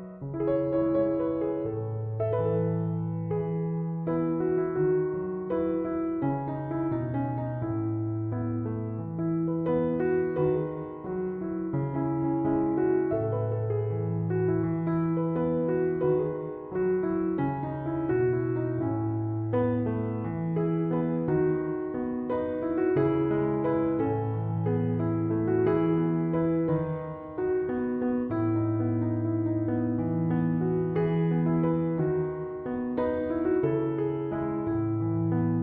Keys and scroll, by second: 15.0 3, 15.3 Return, 19.5 3, 19.8 Return.